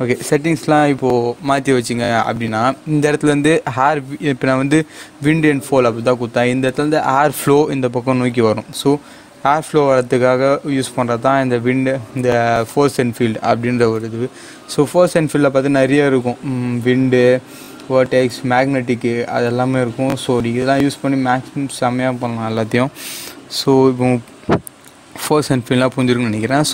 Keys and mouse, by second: 12.6 click, 13.8 shift+a.